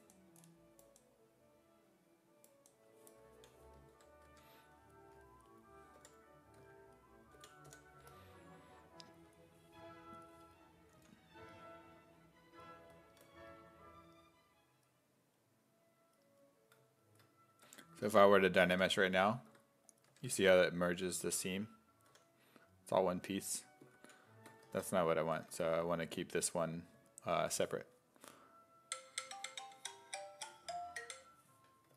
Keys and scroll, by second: 4.0 2, 4.3 1, 6.0 5, 6.6 s, 7.4 b, 7.7 i, 11.0 s, 13.2 e, 17.7 1, 18.7 1, 20.1 1, 21.3 s, 22.1 d, 23.5 d, 24.0 ctrl+z, 25.4 w, 26.4 w.